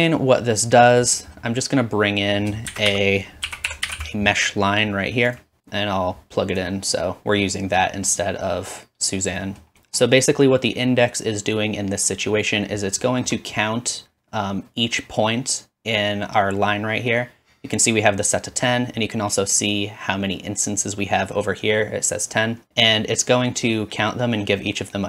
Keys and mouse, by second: 0.0-7.3 drag, 2.7 shift+a, 5.6 typing, 13.0 shift+middle click, 22.7 middle click, 23.0-25.0 drag.